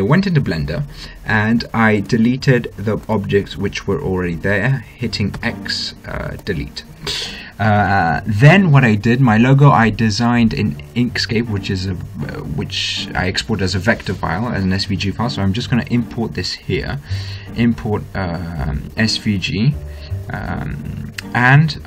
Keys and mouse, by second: 2.2-5.2 right drag, 5.5 x, 16.1-18.1 drag, 20.6-21.8 drag.